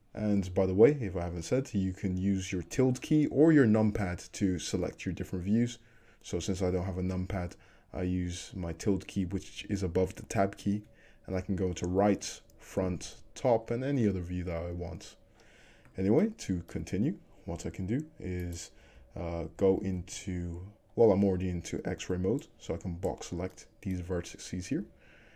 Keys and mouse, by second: 0.2 `, 11.8 `, 12.8 `, 13.7 `, 14.1-18.5 drag, 18.5 middle click, 18.6-19.9 alt+drag, 19.1 alt+z, 19.9 alt+z, 21.0-23.4 drag, 23.4 shift+middle drag, 23.7-24.0 shift+drag, 24.8 g.